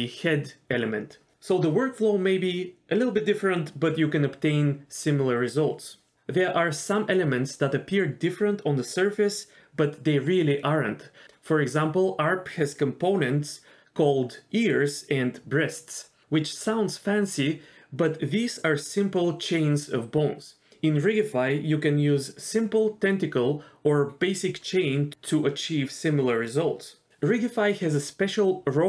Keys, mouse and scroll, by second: 16.1 click, 18.4-21.1 drag, 27.2 middle drag, 27.5-27.9 scroll down 1.